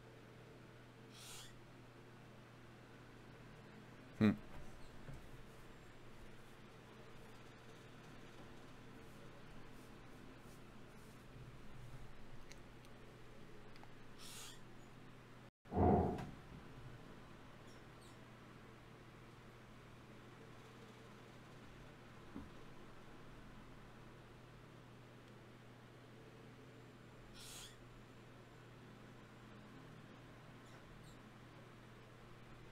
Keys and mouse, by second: 0.0-1.0 drag, 2.0-4.2 middle drag, 7.7 middle click, 9.6-11.7 right drag, 13.3 right click, 14.1 g, 16.5 s, 17.1 g, 17.9-19.7 drag, 18.1 s, 18.7 g, 20.1 click, 20.5 ctrl+z, 20.9 ctrl+z, 22.5 ctrl+z, 24.5 g, 27.7 ctrl+z, 28.1 ctrl+z, 28.5 ctrl+z, 30.3 g, 31.9 g.